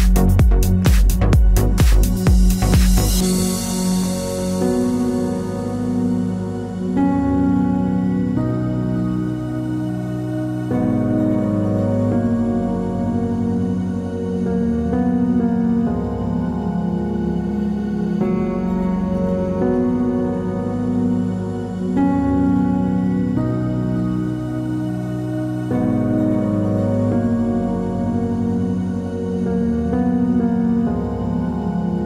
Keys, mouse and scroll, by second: 4.2 t, 4.6 click, 5.6-9.3 typing, 11.4 Left, 12.1 -, 12.8 Up, 13.6 -, 14.0 Return, 16.0 click, 17.2 Return, 18.5 click, 20.4 KP_1, 20.7 KP_8, 20.8 KP_Enter, 22.0 click, 26.8 t, 27.4 click, 28.2 KP_5, 28.4 KP_0, 29.6 shift+5, 29.7 Return, 30.9 click.